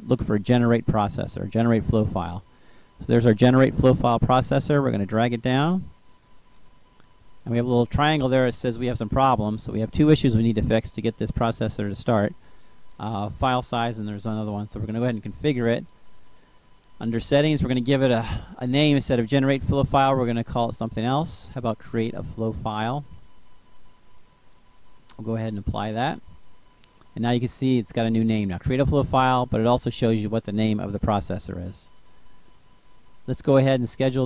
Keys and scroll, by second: 0.0-0.5 typing, 18.2-22.7 typing.